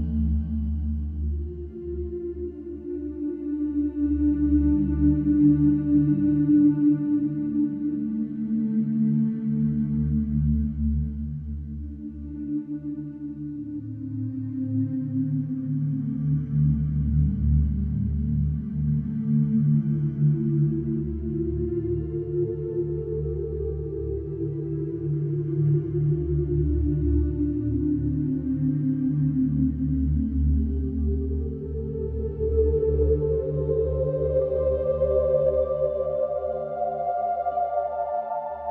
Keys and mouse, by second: 2.6 Tab, 2.8 Tab, 4.8 middle click, 6.2-6.8 middle drag, 10.4 a, 17.8 Delete, 23.9 Delete, 24.6 middle click, 27.0 Delete, 28.9 Delete, 29.8 Delete, 30.8 Delete, 31.0 Delete, 33.3 Delete, 37.1 middle click, 37.5 middle click.